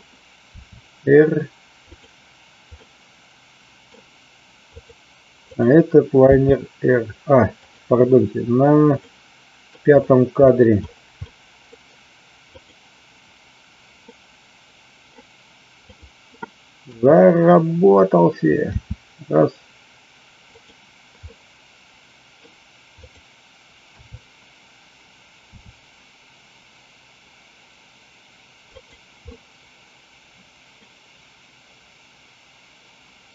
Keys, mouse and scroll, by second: 1.8 click, 2.7-3.8 middle drag, 4.7 click, 5.5 click, 7.5 click, 9.2 middle click, 11.3 middle click, 12.6 click, 14.0-15.0 middle drag, 16.8 KP_1, 18.7 r, 20.5 click, 21.2-22.3 middle drag, 23.1 click, 23.8 KP_3, 25.4 r, 28.7 click, 29.3-30.8 middle drag.